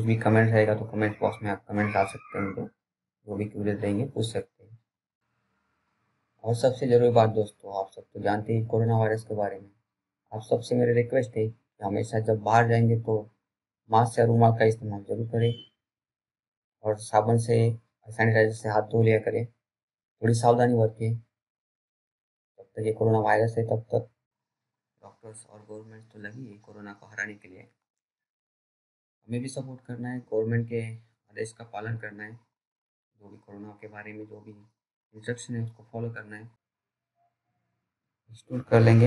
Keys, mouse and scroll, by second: 1.8-3.0 scroll up 1, 3.0 click, 21.2 BackSpace, 24.9 click, 25.5-26.1 scroll down 1, 26.1 middle click, 26.8 right click, 27.4 click, 38.7 right click.